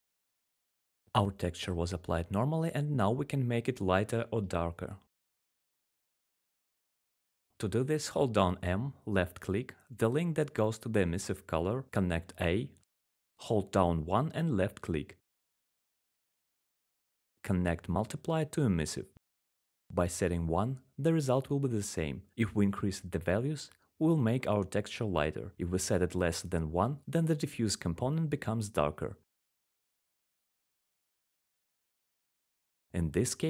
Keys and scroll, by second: 0.9-3.8 typing, 8.6-9.4 typing, 11.8-12.7 1, 19.6 1, 21.0 Return, 23.1 1, 23.3 1, 28.1 1, 28.6 Return.